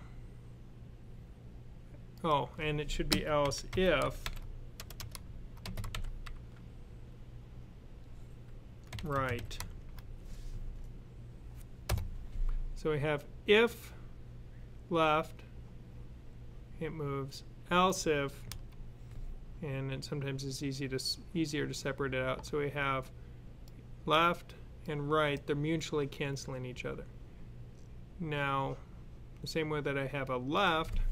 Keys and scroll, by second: 3.6-5.8 typing, 8.8-9.7 typing.